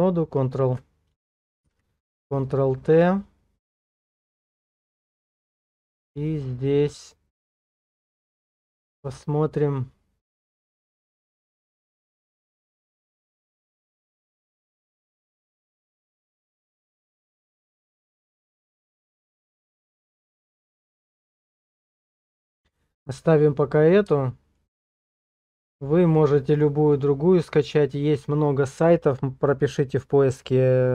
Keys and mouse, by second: 1.7 ctrl+t, 24.1-30.9 shift+middle drag.